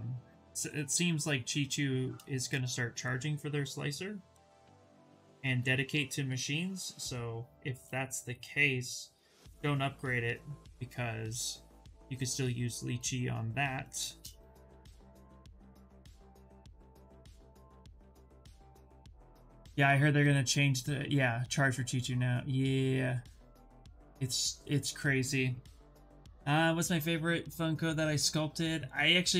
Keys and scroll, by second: 4.6 s.